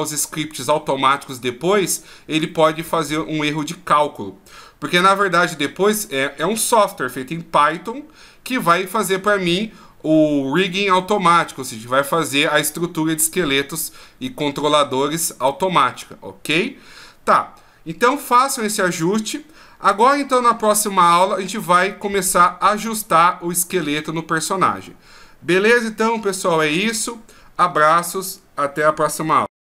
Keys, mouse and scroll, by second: 19.0 middle click, 24.8 middle click.